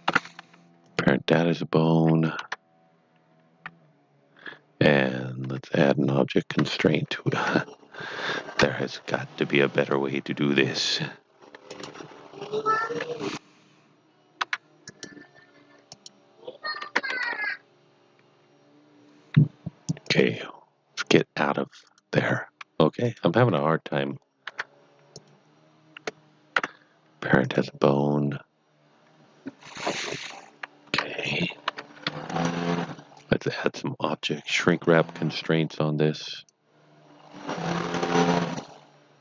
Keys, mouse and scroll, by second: 0.9 click, 2.3 Tab, 5.3 Tab, 5.4 Tab, 7.4 Tab, 10.2 Tab, 11.6 click, 14.8 click, 15.9 click, 16.8 Tab, 20.0 click, 21.0 click, 23.0 shift+click, 25.1 click, 27.4 click, 31.3 click, 32.3 click, 33.7-39.2 click.